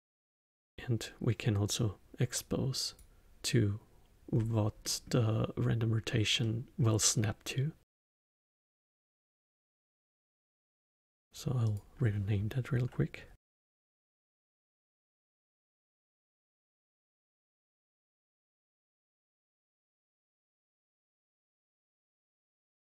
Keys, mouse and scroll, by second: 0.5 click, 4.3-4.8 scroll up 1, 4.8-7.9 middle drag, 7.9 click, 8.8-10.1 scroll down 3, 10.1 click, 10.9-14.0 drag, 15.0 click, 16.9 click, 18.2 click, 18.7 click, 19.5 scroll down 2, 19.6 click, 22.8 middle click.